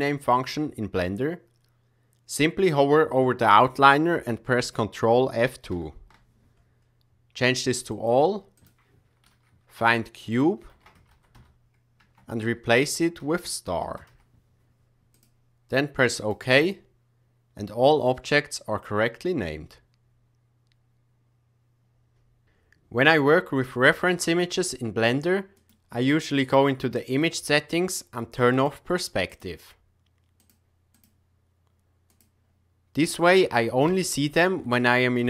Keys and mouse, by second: 5.7 ctrl+F2, 25.5 click, 28.5 click, 29.2 click, 30.3 click, 32.1 click, 33.8 KP_1, 34.7-35.1 shift+middle drag.